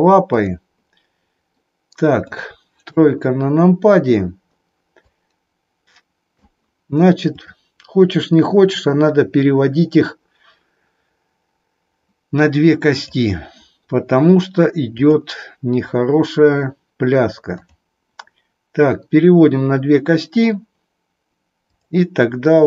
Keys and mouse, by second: 0.3 click, 1.6 middle click, 2.9 KP_3, 5.2-6.4 drag, 7.4 click, 13.0 click, 14.9-16.0 drag, 17.6 click, 21.7 click.